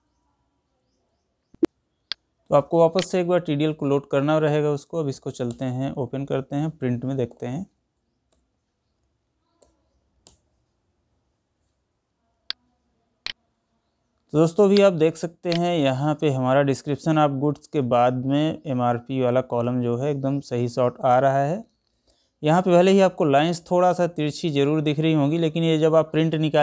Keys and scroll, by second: 6.9 ctrl+p, 9.2 Left.